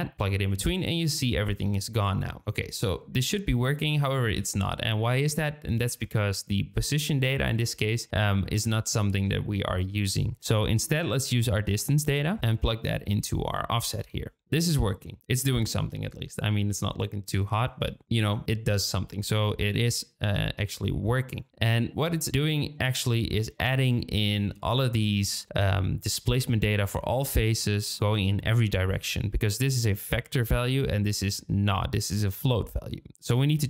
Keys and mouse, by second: 2.6-3.5 middle drag, 4.3-5.8 drag, 6.0 shift+middle click, 12.2-13.5 drag, 14.5-15.4 middle drag, 21.9-22.2 middle drag, 22.2 click, 22.9-23.7 shift+middle drag, 23.9-24.4 shift+middle drag, 33.3 click.